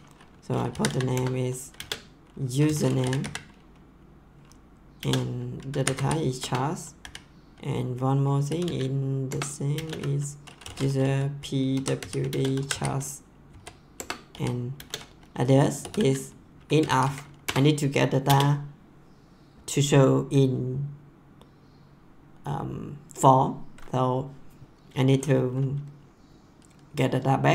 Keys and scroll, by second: 0.4-3.7 typing, 5.0-7.0 typing, 8.2-18.2 typing, 9.3 Return, 13.9 Return.